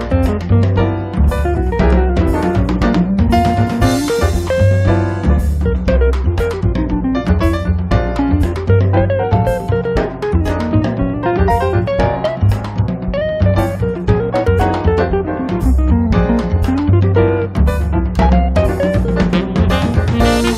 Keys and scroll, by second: 0.9 p, 4.1 space, 13.4 r, 17.3 p.